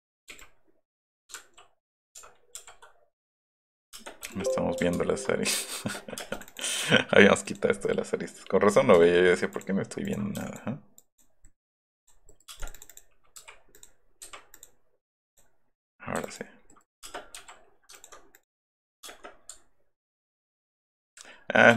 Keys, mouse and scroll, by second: 0.3 e, 2.1 ctrl+v, 3.1 click, 3.9 space, 4.3 e, 4.3 click, 6.2 space, 6.3 click, 7.8 click, 8.9 l, 9.5 click, 10.1 click, 10.4 e, 11.5 middle click, 11.9 click, 12.5 space, 12.6 click, 12.8 click, 13.7 click, 14.5 click, 15.3 click, 16.2 e, 16.3 click, 16.6 middle click, 17.1 space, 18.0 alt+click, 18.4 click, 18.7 middle click, 19.1-19.7 middle drag, 19.1 space, 19.7 Escape, 19.9 Escape.